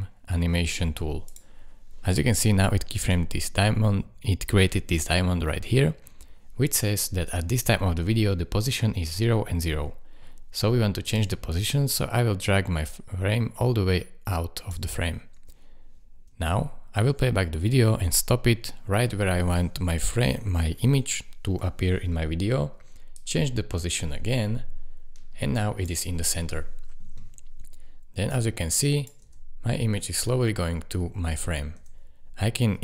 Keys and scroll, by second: 16.3 space, 17.9 space, 29.2 space, 31.8 space.